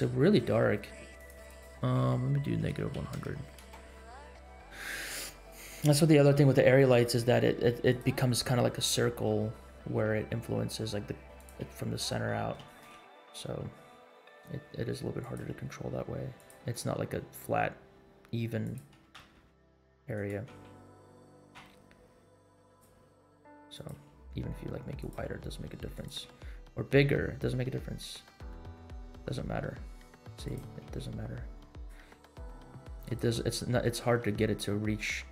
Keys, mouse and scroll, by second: 1.1 click, 1.4-3.9 drag, 3.2 KP_0, 4.7 scroll down 2, 6.0 g, 9.3-10.4 middle drag, 10.6 r, 11.7 middle click, 12.5 g, 15.5 r, 16.6 g, 18.9 s, 20.3 x, 21.2 s, 23.2 r, 23.9 r, 25.1 g, 26.3 s, 31.0 s, 32.2 middle click, 32.5 r, 33.3-33.8 middle drag, 34.1 r.